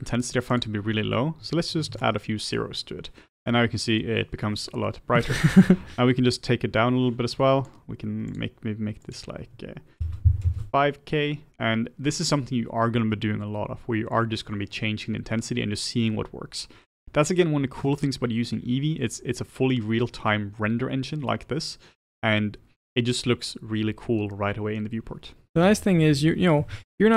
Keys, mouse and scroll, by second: 2.0-2.9 drag, 5.7-14.7 drag, 25.6-27.1 middle drag, 25.8 click.